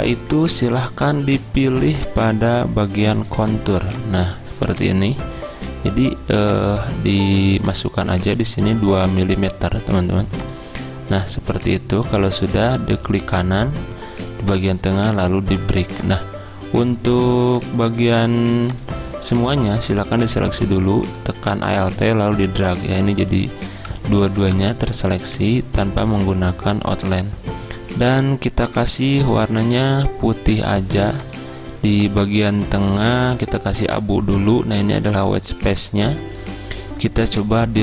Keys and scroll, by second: 8.8 2, 24.2 ctrl+z.